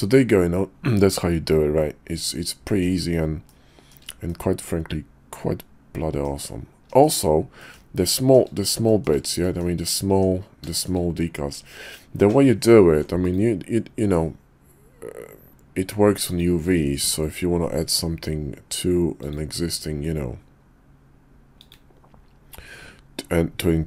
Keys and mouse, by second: 3.5-3.9 shift+middle drag, 4.3-6.2 middle drag, 7.0 shift+middle click, 7.6 middle click, 8.2 shift+middle drag, 8.9 shift+middle click, 9.4 middle click, 10.1 Tab, 10.7 shift+click, 12.8 ctrl+r, 17.8 ctrl+r.